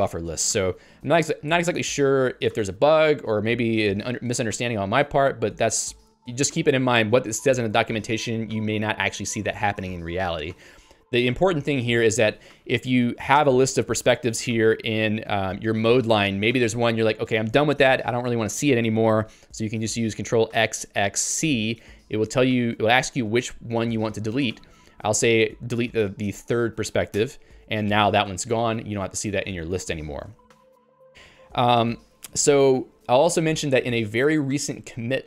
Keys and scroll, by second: 13.1 ctrl+g, 24.5 ctrl+j, 27.3 Return.